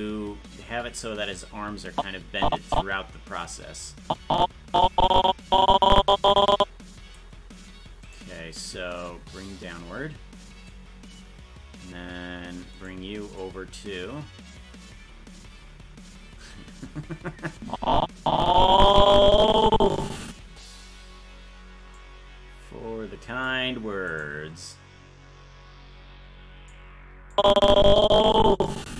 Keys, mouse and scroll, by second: 1.9-7.3 drag, 8.1 right click, 9.0-10.7 drag, 12.9 right click, 13.4-16.5 drag, 17.6-20.8 drag, 21.9-23.5 drag, 24.2 right click, 24.7-26.7 drag, 27.3-28.9 drag.